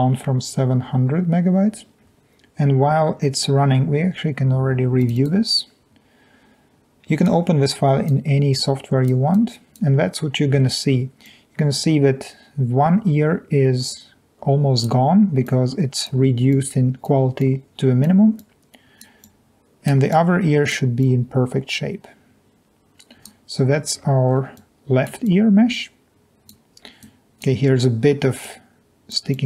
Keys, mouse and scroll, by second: 8.5 click, 9.3 click, 10.1-10.5 scroll up 2, 10.5-11.7 scroll down 2, 10.7 middle click, 10.9 middle click, 11.2-11.7 drag, 15.4-16.0 drag, 16.5 click, 17.4 click, 18.3 click, 19.2 click, 20.2 click, 21.0 click, 22.6 click, 23.5 scroll down 1, 24.0 scroll up 2, 24.2 scroll down 2, 24.3-25.1 scroll up 2, 24.5 click, 25.3-26.4 drag, 27.0 click, 28.4-29.1 drag, 29.3 click.